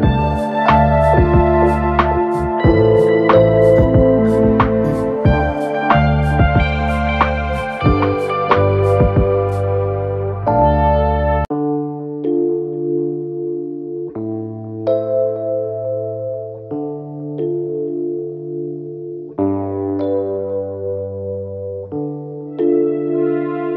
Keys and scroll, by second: 1.9 ctrl+=, 11.7 ctrl+g, 16.8 ctrl+j.